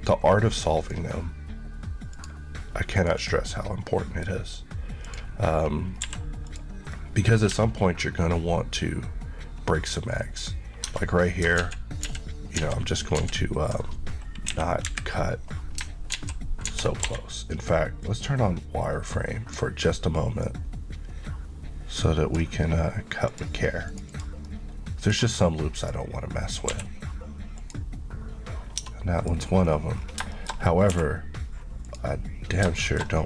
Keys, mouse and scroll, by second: 3.7 middle click, 5.1 click, 5.5-6.0 scroll, 6.0 scroll up 1, 6.1 q, 6.5 click, 7.0 middle click, 7.6 Tab, 9.4 scroll up 1, 10.9 Tab, 11.4 scroll down 2, 11.6 ctrl+z, 12.6 ctrl+z, 14.5 KP_1, 14.9 KP_3, 16.2 alt+z, 18.1 alt+click, 24.2 click, 24.5 middle click, 26.7 q, 27.6 click, 28.8 Tab, 28.9 middle click, 29.4 scroll up 1, 29.6 scroll down 1, 30.4 middle click, 30.8 scroll up 1, 31.0 1, 31.9 click, 32.6-33.2 scroll up 3, 32.8 middle click.